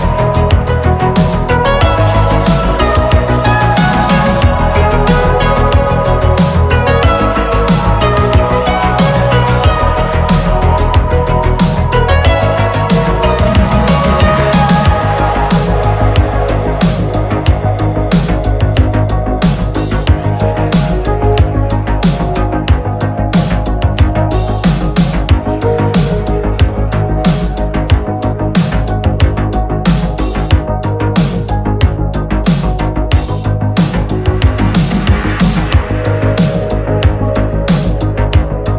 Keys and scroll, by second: 3.1 space, 3.3 space, 3.6 space, 4.5 ctrl+z, 8.4 space, 10.7 ctrl+z, 14.7 ctrl+z, 16.3 ctrl+z, 16.5 ctrl+z, 17.0 ctrl+s, 21.6 space, 24.1 space, 24.7 space, 26.2 space, 27.5 space, 30.8 space, 32.0 space, 32.7 space, 33.4 space, 35.7 space, 36.8 ctrl+z.